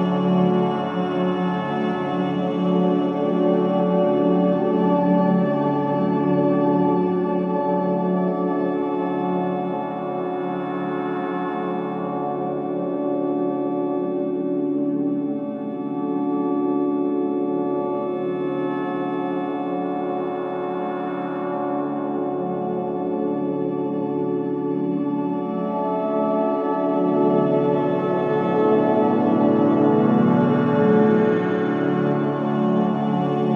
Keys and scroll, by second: 4.7 KP_0, 7.5 typing, 7.9 ctrl+space, 9.0 c, 11.3 v, 13.3 typing, 16.8 c, 19.1 z, 22.6 KP_0, 27.0 KP_5, 27.5 Return, 29.5 ctrl+KP_0, 31.6 ctrl+alt+KP_3, 32.9 ctrl+space.